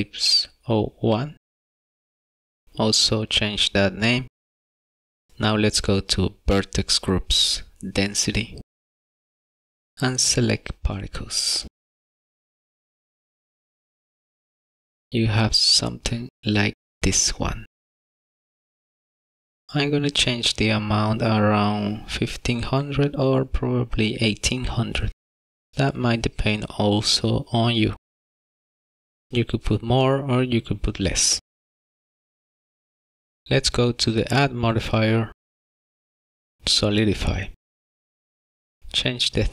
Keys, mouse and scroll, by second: 2.6 click, 2.7 click, 2.8 click, 12.3 click, 15.8 middle click, 20.7 click, 23.6 KP_0, 26.2 shift+middle click, 28.9 scroll up 1, 29.8 middle click, 31.6 scroll down 2, 31.8 shift+middle click, 32.5 click, 32.6 click, 32.8 KP_0, 33.1 scroll down 2, 33.3 middle click, 33.4 scroll up 3, 34.8 click, 36.2 click.